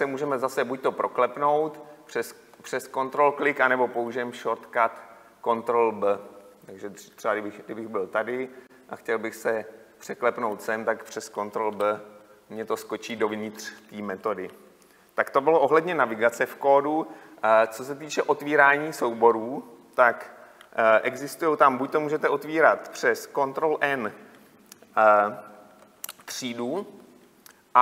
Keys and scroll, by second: 12.4 ctrl+b, 26.5 ctrl+n.